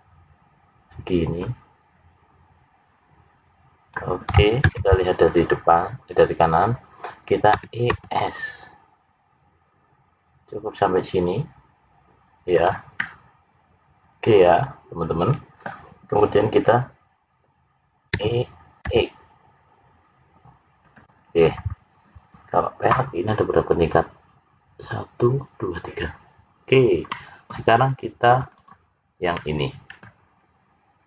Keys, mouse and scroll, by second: 1.3 click, 3.9 click, 7.5 e, 12.9 middle click, 18.1 e, 27.0 middle click, 28.3 click, 29.3 middle click, 29.3 click, 30.3-31.0 scroll down 2.